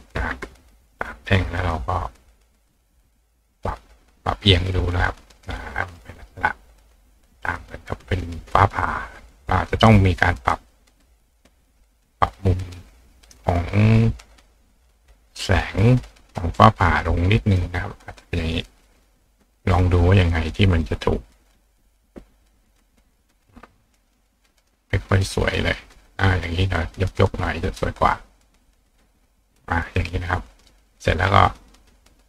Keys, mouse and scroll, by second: 2.7 click, 3.3 click, 4.4-6.0 drag, 9.3 click, 10.5-11.1 drag, 14.9-15.6 drag, 16.0-16.9 drag, 17.8-18.6 drag, 19.0-19.7 drag, 19.7 right click, 19.9 right click, 20.7-21.5 drag, 22.2 click, 25.1 right click, 25.1 click, 25.3 right click, 25.6-26.7 drag, 27.2 click, 27.3-32.2 right drag, 28.2-28.7 drag, 28.9 click, 30.6 click, 31.1 click, 31.8 click.